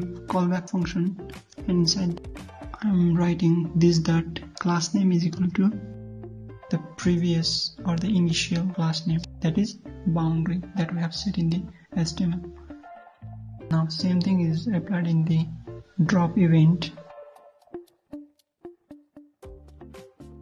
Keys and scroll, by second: 2.2 ctrl+v, 11.0 ctrl+c, 13.8 ctrl+v, 16.0 ctrl+z.